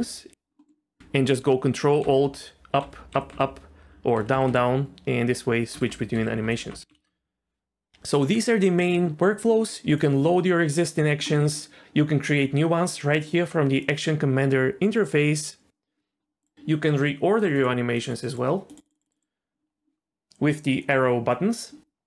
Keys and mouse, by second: 2.0 ctrl+alt+Up, 2.8 ctrl+alt+Up, 3.1 ctrl+alt+Up, 3.3 ctrl+alt+Up, 4.2 ctrl+alt+Down, 4.3 ctrl+alt+Down, 4.5 ctrl+alt+Down, 5.7 ctrl+alt+Down, 5.9 ctrl+alt+Down, 6.1 ctrl+alt+Up, 6.3 ctrl+alt+Up, 6.4 ctrl+alt+Up, 6.6 ctrl+alt+Up, 6.7 ctrl+alt+Up, 6.9 ctrl+alt+Up, 10.0-11.3 drag, 17.4 click, 17.5 click, 18.1 click, 18.3 click, 18.7 click.